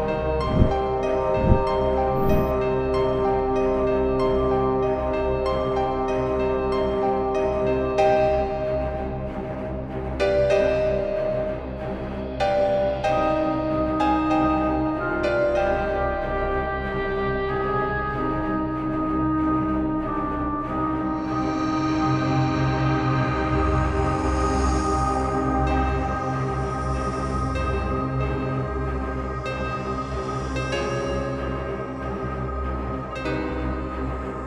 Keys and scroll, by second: 4.9 Down, 8.2 v, 9.2 space, 10.7 ], 11.9 space, 14.0 space, 15.5 [, 17.3 space, 18.6 [, 20.1 space, 20.5 [, 22.1 space, 25.6 space, 31.2 v, 32.5 ctrl+t.